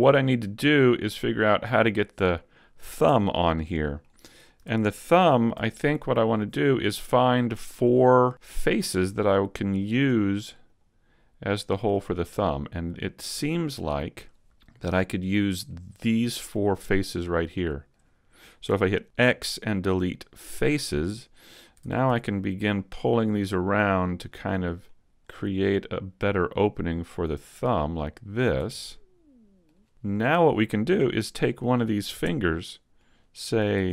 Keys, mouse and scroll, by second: 1.0 middle click, 3.0 Tab, 3.4 middle click, 4.6 ctrl+Tab, 6.1 middle click, 7.5 shift+middle click, 8.0 middle click, 8.3 middle click, 9.8 right click, 10.2 shift+right click, 10.6 shift+right click, 11.7 right click, 12.1-12.4 scroll down 2, 12.4 middle click, 14.6 shift+middle click, 15.6 middle click, 17.2-18.0 scroll up 2, 17.6 shift+middle click, 18.7 x, 20.3 middle click, 21.0-21.8 scroll up 2, 21.8 ctrl+Tab, 22.4 middle click, 23.3 right click, 24.2 click, 25.2 super+z, 26.2 right click, 27.4 click, 28.8 middle click, 29.7 Tab, 29.7-30.2 scroll down 1, 30.2 shift+middle click, 30.2-30.6 scroll down 1, 30.6 shift+scroll up 1, 30.8 middle click, 32.2 Tab, 32.6 middle click, 33.8 ctrl+Tab.